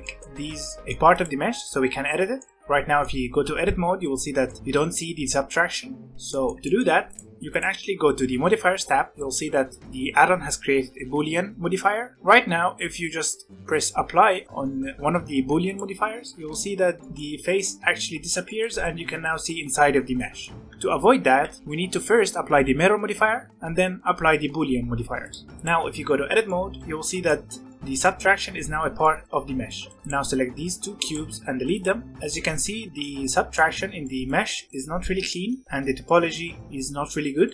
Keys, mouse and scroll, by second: 1.1 click, 1.5 Tab, 2.3-5.6 middle drag, 5.6 Tab, 6.0-7.0 middle drag, 7.0 click, 7.4 click, 8.5-11.8 scroll down 7, 12.8-14.4 scroll down 1, 15.6-16.2 drag, 16.2-16.6 shift+middle drag, 16.6-17.0 scroll up 1, 17.0-21.3 middle drag, 21.3 ctrl+z, 21.7-23.4 scroll up 4, 23.4 click, 26.0 Tab, 26.4-29.9 middle drag, 29.9 click, 31.0 shift+click, 31.4 x, 32.1 scroll up 3, 32.3-35.0 middle drag, 35.0 scroll up 1, 35.2-37.5 middle drag.